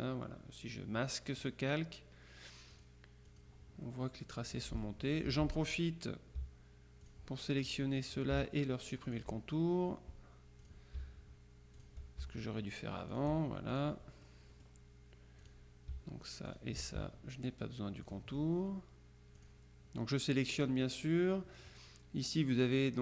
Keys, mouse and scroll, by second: 0.0 click, 0.8 click, 1.5 click, 2.8 click, 3.9 click, 4.5 click, 5.4 F2, 5.7 click, 7.1 shift+click, 9.1 shift+click, 10.7 click, 11.9 shift+click, 13.2 click, 14.1-15.2 drag, 15.5 click, 16.6 shift+click, 18.1 click, 19.5 click, 22.9 click.